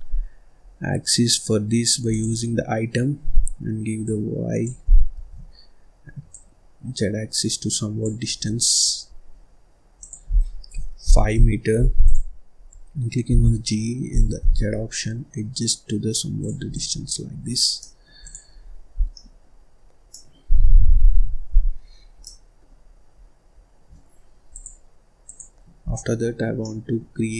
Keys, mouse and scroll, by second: 2.0-5.1 drag, 5.1 ctrl+z, 6.2-8.2 drag, 8.2-8.7 scroll down 5, 8.7-9.9 scroll up 1, 9.9-12.1 drag, 12.5-13.2 scroll up 2, 13.2 g, 16.6 click, 16.9-17.3 scroll down 4, 17.3-17.7 scroll up 2, 17.7 middle click, 18.1 click, 18.5-18.9 scroll up 1, 18.9 scroll down 1, 19.1 middle click, 19.6-20.0 scroll up 2, 20.0 middle click, 20.4-20.9 scroll down 1, 20.9 ctrl+s, 21.4-21.8 scroll down 1, 21.8-22.1 scroll up 1, 22.1 middle click, 22.7-23.1 scroll up 2, 23.1-23.5 scroll down 1, 23.5-24.4 scroll up 1, 24.4-25.8 drag, 25.8-26.2 scroll down 1, 26.2 scroll up 2, 26.4 scroll down 1, 26.5 middle click.